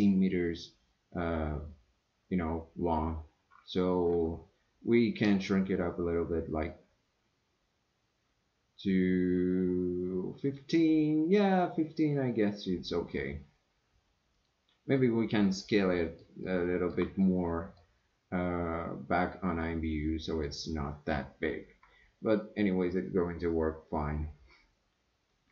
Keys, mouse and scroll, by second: 5.3 s, 15.6-16.2 middle drag, 16.4-16.9 shift+middle drag, 17.2-17.8 middle drag, 19.6-20.4 middle drag.